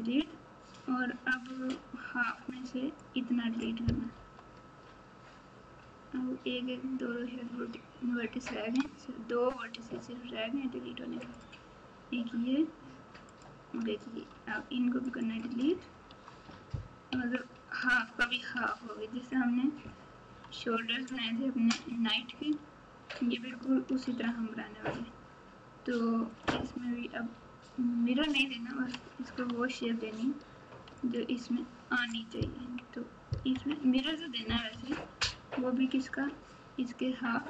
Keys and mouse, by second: 1.6-3.0 drag, 4.1 KP_7, 11.2 shift+click, 13.3 shift+click, 13.3 shift+right click, 14.3 x, 16.0 Tab, 17.1 KP_1, 20.5 Tab, 22.5 Tab, 24.0 alt+z, 26.3-27.8 drag, 29.5 Tab, 31.0 alt+click, 32.5 KP_1, 33.5 KP_3, 34.7 KP_9, 36.0 alt+z.